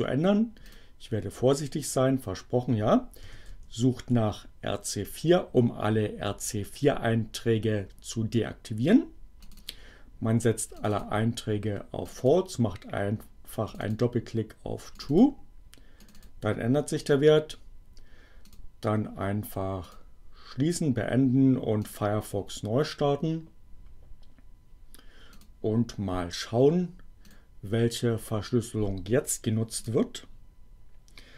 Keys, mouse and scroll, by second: 0.6 click, 3.0-4.4 typing, 9.3 click, 10.8 click, 12.0 click, 13.7 click, 14.9 click, 16.0 click, 18.5 click, 19.8 click, 21.7 click, 25.3 click, 27.2 click, 29.8 click.